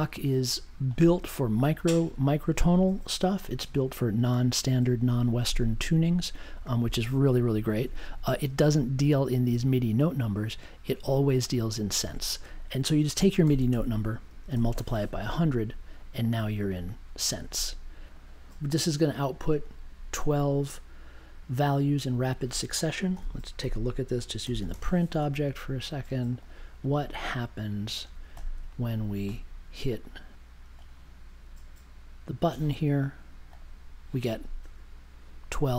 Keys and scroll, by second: 13.4 shift+8, 13.7 space, 14.4 1, 23.1-25.2 typing.